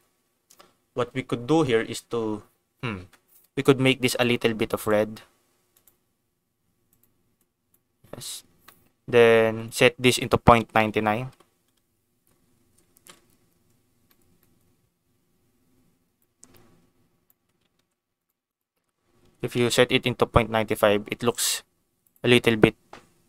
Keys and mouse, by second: 4.1 click, 4.8 click, 8.2 click, 8.6 middle click, 9.6-12.0 drag, 10.8 9, 12.9 ctrl+s, 14.1 click, 14.3 click, 16.1-17.2 drag, 17.8 ctrl+z, 18.2-23.2 drag.